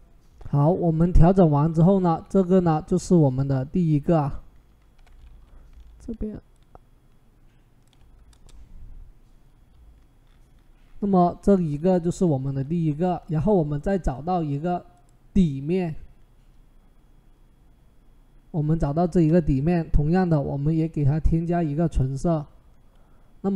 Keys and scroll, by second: 5.1 ctrl+t, 8.1 Return.